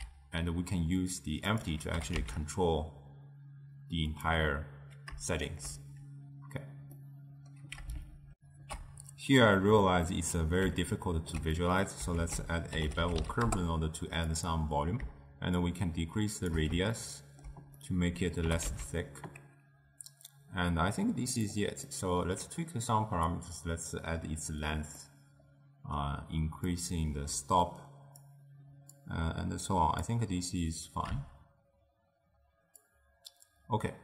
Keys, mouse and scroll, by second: 0.0 s, 2.1 g, 7.1-8.4 middle drag, 8.4 ctrl+alt+shift+w, 8.8 ctrl+alt+shift+q, 10.1 scroll up 2, 10.2-12.3 middle drag, 12.3 ctrl+a, 15.7-17.0 shift+drag, 17.0-18.6 ctrl+middle drag, 18.6 g, 22.0-23.4 middle drag, 23.4-25.1 drag, 25.1-26.8 middle drag, 26.8-29.1 drag, 32.9-34.0 shift+drag.